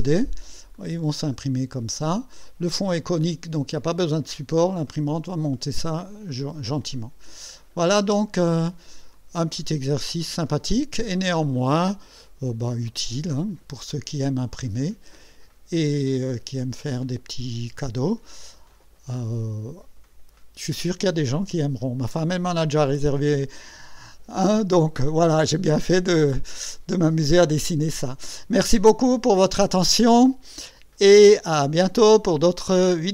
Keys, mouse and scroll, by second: 0.8 click, 2.4 click, 7.0 click, 8.1 space, 9.2 click, 10.5 click, 11.6 right click, 12.9-13.6 drag, 14.9-15.6 right drag, 18.6 click.